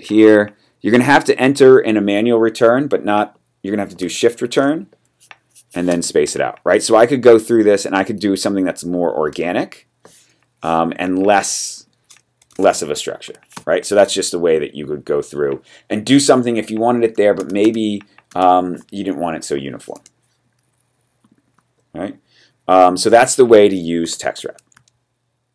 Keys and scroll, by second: 4.5 shift+Return, 5.8 space, 12.5 shift+Return, 13.5 space, 17.4 space, 17.6 space, 18.2 space, 19.9 BackSpace.